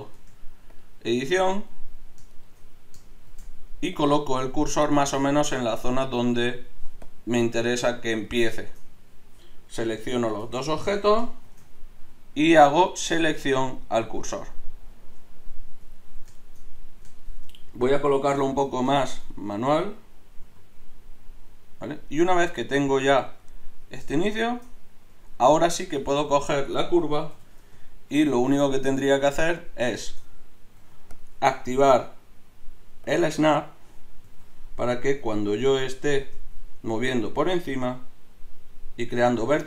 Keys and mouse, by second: 0.2 ctrl+Tab, 3.2 shift+s, 6.0 Tab, 9.7 right click, 11.4 shift+s, 15.4 middle click, 16.0 middle click, 16.9 middle click, 18.3 KP_7, 20.4 g, 27.3 KP_3, 28.9 Tab, 30.8 g, 37.0 g.